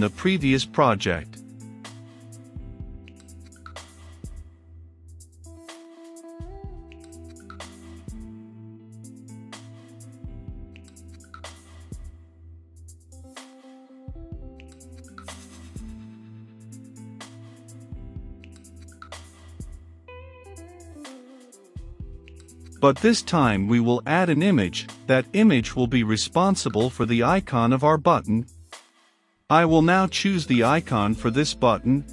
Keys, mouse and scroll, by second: 4.3-6.2 typing, 5.0 Return, 6.0 Return, 6.3 Return, 6.8 Up, 7.7-10.3 typing, 10.6 Down, 12.1 typing, 13.3 Return, 14.7 shift+~, 15.6 right click, 16.4 click, 16.8 shift+3, 17.3 f, 17.8 click, 18.3 right click, 18.6 click, 19.5 right click, 19.8-20.9 drag, 21.0 ctrl+v, 21.3 click, 21.8 Return, 22.4 i, 22.6 m, 22.7 a, 24.3 Return, 25.2 middle click, 26.0-27.9 drag, 27.9-28.9 typing, 29.8-31.0 drag, 31.9-32.1 drag.